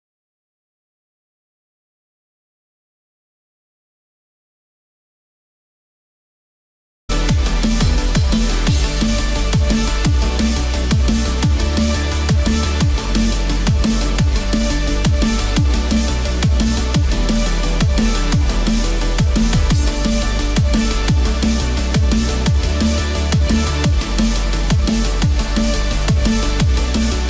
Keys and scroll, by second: 18.8 ctrl+-, 26.9 ctrl+-.